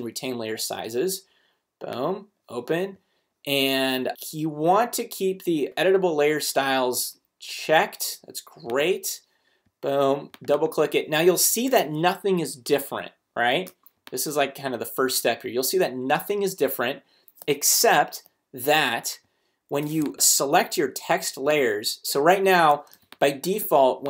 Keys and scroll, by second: 13.7 space, 22.9 space.